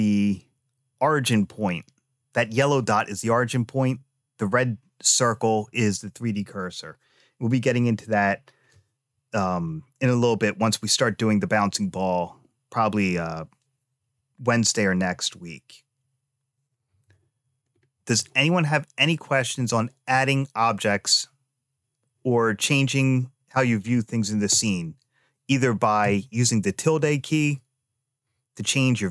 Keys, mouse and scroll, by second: 2.6-3.0 scroll down 2, 17.5-18.4 scroll down 2, 18.4 middle click, 22.2-23.4 middle drag, 23.6-24.0 scroll up 2, 24.0-25.3 scroll down 1.